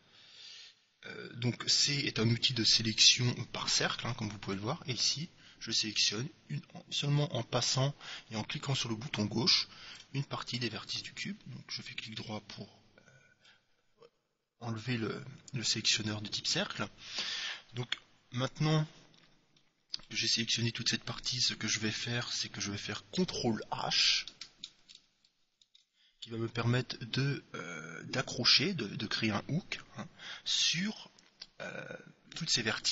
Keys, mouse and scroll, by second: 10.8-12.4 right drag, 12.3-14.0 middle drag, 19.7-21.5 middle drag, 25.4 ctrl+h.